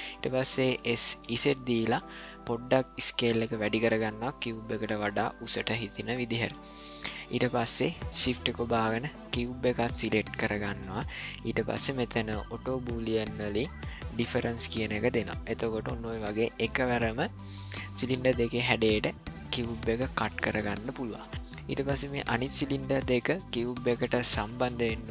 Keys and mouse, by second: 0.8 s, 6.8 ctrl+middle click, 21.3 middle click.